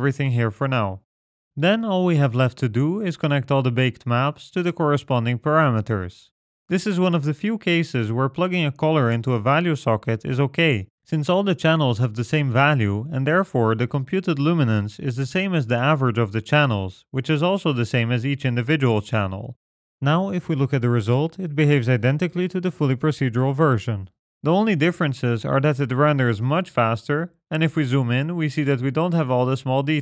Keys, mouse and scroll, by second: 0.1 g, 1.1 click, 2.0-3.2 scroll up 10, 2.5 middle click, 3.2 click, 3.2-3.8 scroll up 1, 4.3-4.8 scroll up 3, 4.5 middle click, 4.9 middle click, 5.8 click, 7.7-8.1 scroll down 3, 7.9 middle click, 8.1-9.1 scroll up 2, 9.1 click, 9.1 scroll up 1, 11.6 middle click, 12.7 click, 14.1 middle click, 14.8 click, 16.5 click, 17.8 shift+right click, 18.3 g, 18.7 click, 19.4-19.8 scroll down 5, 20.8 click, 20.9-21.5 scroll down 1, 21.7 ctrl+shift+click, 22.9 click, 24.4-24.7 scroll up 5, 25.3-27.2 scroll up 5, 27.2-28.8 scroll up 1, 28.8-29.4 scroll down 9, 29.2 middle click, 29.4 middle click, 29.7-30.0 scroll up 7.